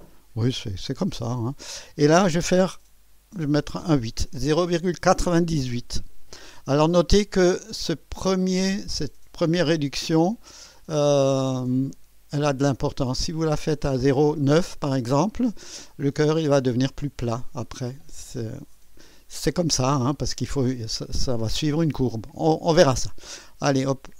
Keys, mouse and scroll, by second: 1.0 Delete, 3.7 typing.